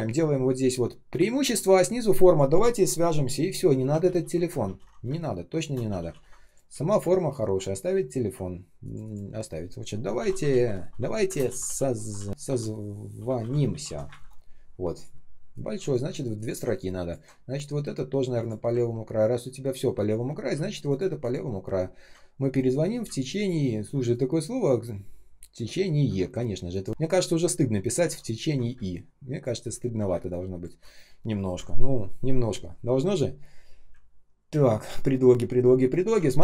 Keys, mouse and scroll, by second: 4.0 ctrl+z, 5.0 space, 5.5 space, 5.8 ctrl+z, 6.7-7.2 ctrl+scroll up 1, 8.4-8.7 ctrl+scroll down 1, 8.7 ctrl+click, 8.9 ctrl+click, 9.8-14.0 typing, 16.3 ctrl+click, 18.8-19.9 ctrl+scroll up 1, 20.8 ctrl+click, 21.7-22.2 ctrl+scroll up 1, 23.1 ctrl+click, 23.3 ctrl+click, 23.5 ctrl+scroll up 1, 26.9 ctrl+scroll up 1, 27.5-27.9 ctrl+scroll down 1, 27.9 ctrl+ы, 28.1 ctrl+click, 28.6 space, 29.1 space, 29.2 space, 36.0 ctrl+click.